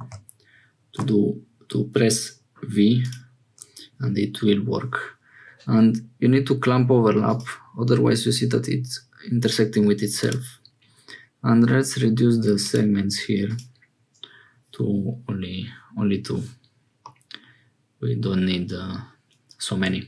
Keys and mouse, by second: 7.2 click, 10.1 click, 17.0-19.8 middle drag.